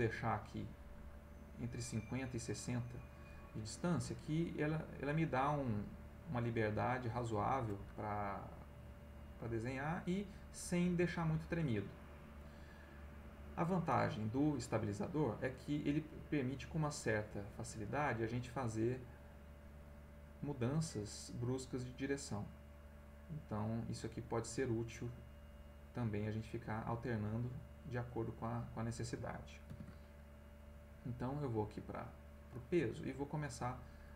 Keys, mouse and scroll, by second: 4.3-7.8 drag, 8.7-10.2 drag, 11.2 ctrl+x, 12.7 click, 14.2 middle click, 16.5-29.0 drag, 29.6 ctrl+x, 31.0 click, 32.1 middle click, 32.9 middle click, 33.6-34.1 middle drag.